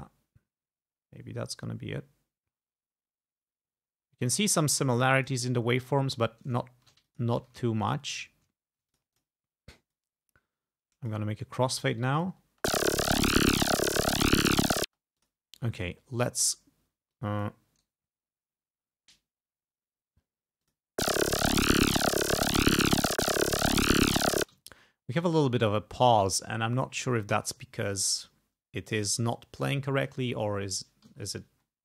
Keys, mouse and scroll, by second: 6.7 ctrl+scroll down 2, 7.1 ctrl+click, 7.4 ctrl+s, 7.9 ctrl+shift+right click, 8.6 ctrl+shift+scroll up 2, 10.0-11.3 drag, 11.4-11.9 ctrl+scroll down 4, 12.2 ctrl+click, 12.5 ctrl+space, 13.1 ctrl+scroll down 2, 13.8 ctrl+scroll up 2, 14.9 space, 15.2 click, 17.1 click, 17.8 right click, 20.6 click, 24.4 space, 24.6-25.9 ctrl+scroll up 6, 26.2 ctrl+scroll down 2, 26.8 ctrl+scroll down 2, 31.4-31.8 ctrl+scroll up 4.